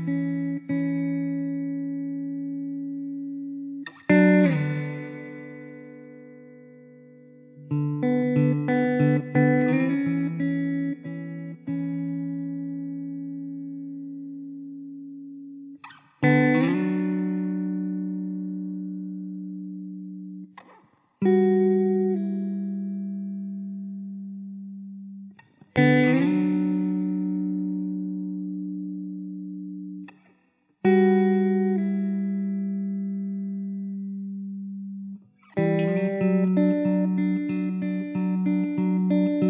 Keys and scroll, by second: 2.7 ctrl+b, 4.8 Escape, 8.2 ctrl+b, 12.9 ctrl+b, 17.1 Tab, 17.7 alt+z, 18.8 1, 20.4 ctrl+z, 20.9 ctrl+z, 22.0 Tab, 22.6 1, 23.0 alt+z, 23.3 `, 27.4 Tab, 28.0 alt+z, 31.2 KP_0, 34.5 shift+d, 35.5 ctrl+z, 38.6 Tab.